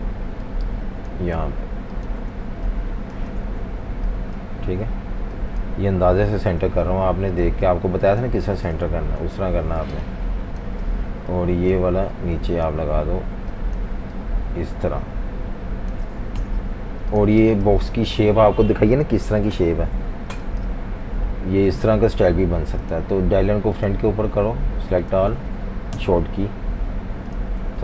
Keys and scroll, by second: 2.3-4.0 typing, 6.5 i, 7.6-8.0 typing, 8.9 super+-, 9.0 super+-, 9.2 super+-, 9.9-10.7 typing, 16.4 shift+super+], 17.3 typing, 20.0-20.3 typing, 25.9 shift+super+], 27.7 typing.